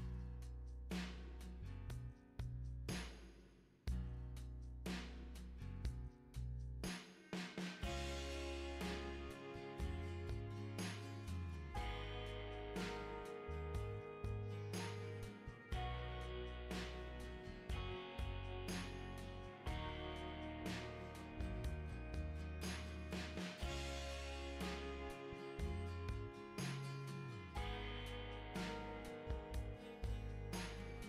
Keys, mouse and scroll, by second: 1.5 click, 3.4-5.1 right drag, 7.1 click, 7.6 middle click, 7.9 middle click, 8.2 middle click, 8.9 middle click, 10.0 click, 10.8 click, 12.5 click, 13.0 click, 13.4 right click, 14.5 click, 16.0 ctrl+click, 19.4 click, 22.5 click, 24.5 click, 25.3 ctrl+click, 29.5 click.